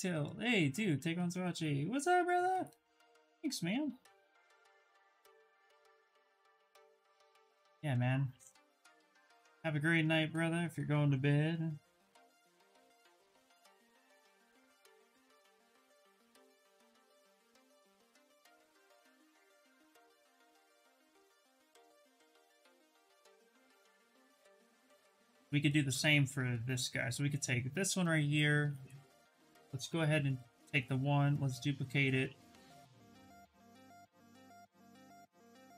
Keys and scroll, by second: 27.0 shift+f, 30.5 ctrl+shift+d, 31.2 shift+f.